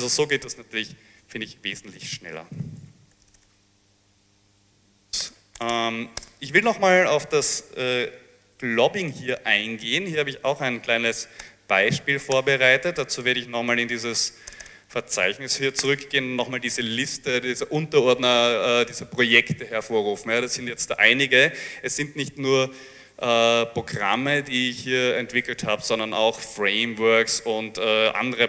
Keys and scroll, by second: 2.9 ctrl+c, 3.4 Return, 3.5-5.2 typing, 5.3 Return, 5.6 Return, 5.8 Return, 6.3 Return, 14.7 Return, 15.6 l, 15.8 l, 15.9 Return.